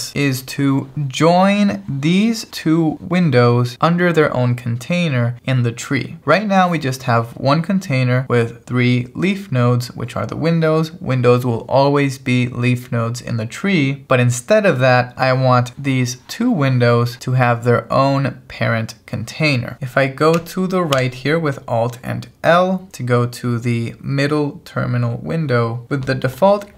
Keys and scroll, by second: 21.0 alt+l.